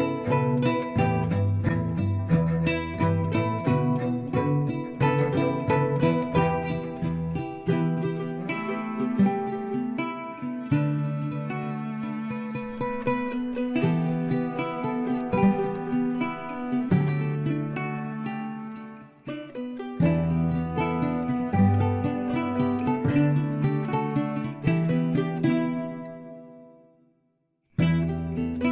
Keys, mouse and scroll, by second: 0.7-3.7 drag, 4.1 scroll up 2, 5.4 shift+z, 7.3 click, 9.2 click, 10.2-10.8 scroll down 2, 10.8 shift+z, 11.5-12.6 middle drag, 12.6 Tab, 13.4-13.8 scroll down 2, 13.8-16.4 middle drag, 16.4-16.7 scroll up 2, 16.7-19.7 middle drag, 19.9-20.2 scroll down 1, 20.2-21.9 middle drag, 21.9 KP_1, 23.5 click, 24.4-25.3 scroll up 4, 25.3-28.3 shift+middle drag.